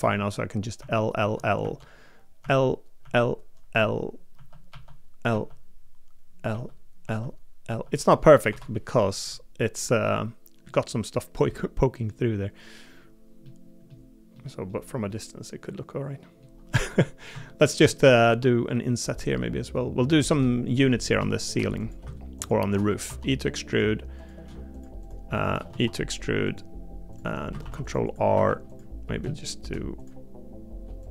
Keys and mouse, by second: 0.0-4.3 typing, 6.5 l, 7.0 l, 8.5 Delete, 10.0 middle click, 11.5 middle click, 13.4 middle click, 14.3 middle click, 15.1-16.4 middle drag, 16.8 Tab, 17.3 Tab, 17.9 shift+middle click, 18.2 3, 25.7 e, 27.6 ctrl+r, 28.3 3.